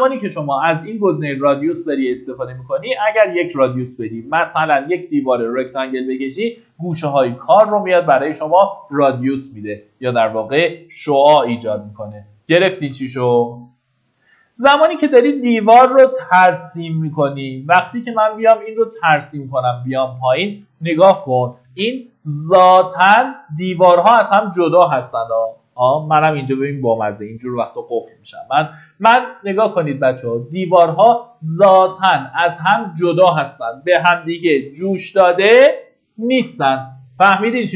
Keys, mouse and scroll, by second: 8.0 Escape, 11.3 click, 15.4 middle click, 16.4 click, 18.9 scroll up 1, 21.8 ctrl+shift+d.